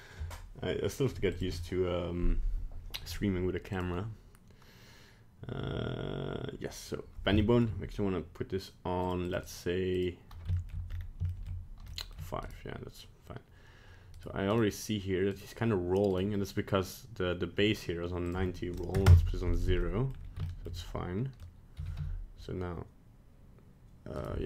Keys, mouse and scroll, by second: 3.7 right click, 7.4 shift+middle click, 9.0 click, 9.2 click, 9.9 click, 10.5 shift+middle click, 10.9 scroll up 3, 11.2 shift+middle click, 11.9 shift+middle click, 12.4 right click, 14.1 right click, 14.5 right click, 15.3 right click, 16.1 right click, 18.2 click, 19.8 middle click, 20.1 scroll down 1, 20.4 shift+middle click, 20.7 middle click, 21.7 g.